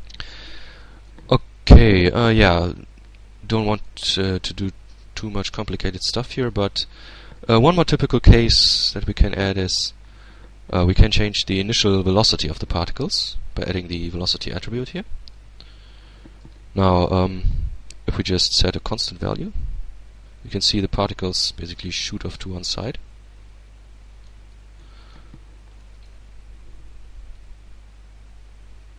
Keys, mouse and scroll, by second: 0.3-1.6 middle drag, 3.1-4.6 middle drag, 4.6-5.1 scroll down 1, 7.5 click, 11.5 click, 15.7-16.2 scroll down 2, 16.2 alt+a, 17.3 click, 18.2-20.7 shift+drag, 20.9-22.0 shift+middle drag, 22.6-23.9 middle drag, 24.0-24.7 middle drag, 25.0 middle click, 26.6-28.9 drag.